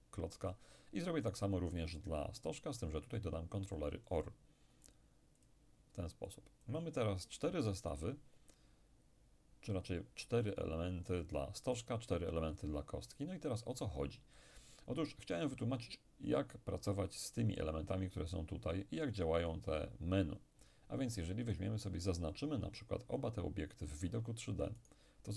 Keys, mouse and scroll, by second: 1.3 right click, 3.1 click, 5.5-7.7 drag, 11.8 right click, 19.0 click, 20.7 click, 24.8 shift+right click.